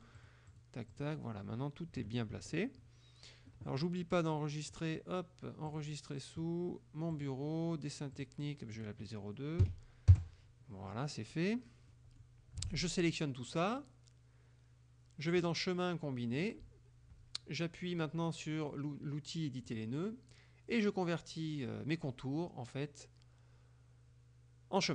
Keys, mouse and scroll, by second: 0.2-0.8 drag, 1.0 click, 2.0 KP_Subtract, 4.8 click, 5.7 click, 7.2 click, 8.2 click, 8.8 click, 9.7 KP_2, 10.2 KP_Enter, 11.3 click, 12.0 click, 12.7 ctrl+a, 15.5 click, 16.4 click, 19.7 click.